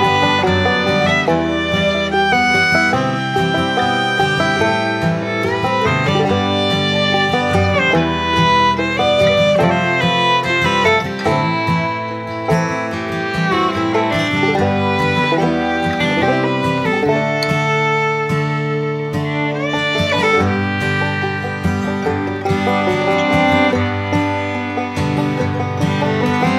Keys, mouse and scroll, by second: 0.6 click, 2.1 click, 6.5-8.0 typing, 7.5 click, 12.0 click, 13.2 l, 14.0 click, 20.4 click, 22.1 click, 26.1 click.